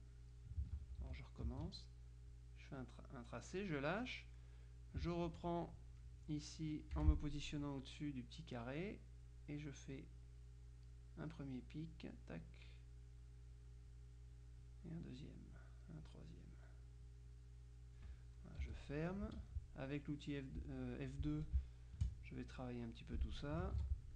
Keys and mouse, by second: 0.9 ctrl+z, 2.4-4.2 drag, 5.3 F2, 5.7 click, 7.1 F6, 8.9 click, 10.8 click, 11.8 click, 12.8 click, 13.6 click, 16.1-18.5 drag, 18.7 z, 18.9 click, 19.4 F2, 21.7 space, 22.7 click, 23.9 ctrl+z.